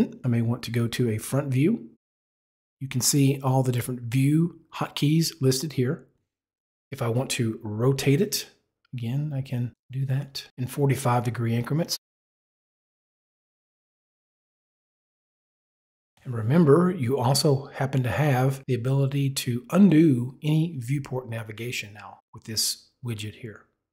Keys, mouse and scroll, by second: 1.1 KP_2, 4.1 click, 9.7 click, 10.6 click, 12.7 click, 13.4 click, 14.3 click, 14.9 click, 15.1 click, 15.8 click.